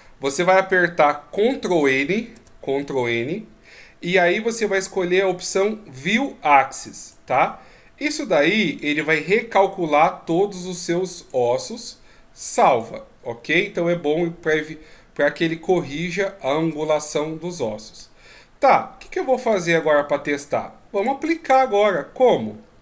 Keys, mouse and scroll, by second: 2.2 ctrl+n, 11.2 click, 14.5 middle click, 21.0 click, 21.5 click, 22.2 right click.